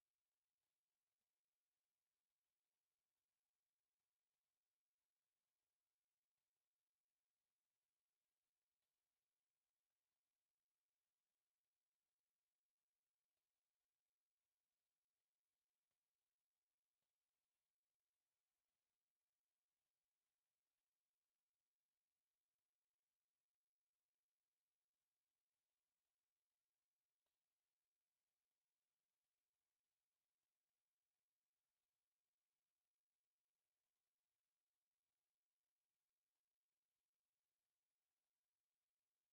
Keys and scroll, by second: 0.5 Escape, 1.7 j, 2.9 Escape, 3.1 t, 3.2 space, 3.8 Escape, 4.0 s, 4.1 space, 8.9 Escape, 10.3-11.1 typing, 10.7 Escape, 12.1 Escape, 12.4-16.6 typing, 13.8 Escape, 14.5 Escape, 15.3 Escape, 15.8 Escape, 16.3 Escape, 17.6 Escape, 20.1 Escape, 21.2-25.1 typing, 21.8 Escape, 22.7 Escape, 23.5 Escape, 24.5 Escape, 25.7 Escape, 26.2 x, 26.3 space, 26.4 f, 26.5 space, 27.9-29.5 typing, 29.9 Escape, 32.6 F8, 33.8 Escape, 34.1 m, 35.0 Escape, 37.7 Escape, 38.2 space.